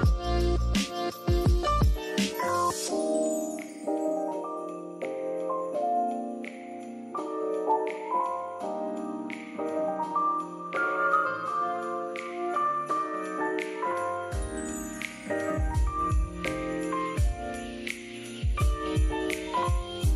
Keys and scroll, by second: 2.1-3.8 typing, 5.0 shift+super+{, 8.1-10.1 typing, 12.3 p, 17.1 shift+v, 17.9 p.